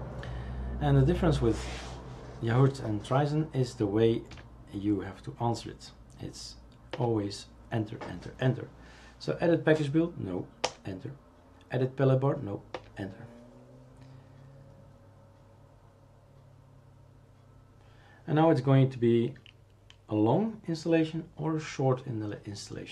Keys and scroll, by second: 4.3 2, 6.9 Return.